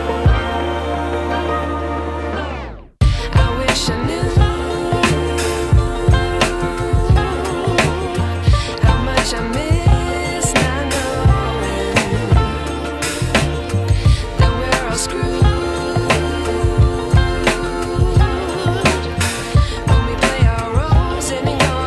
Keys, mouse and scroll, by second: 11.7 click, 15.1-16.9 click, 18.4 right click, 20.6 click.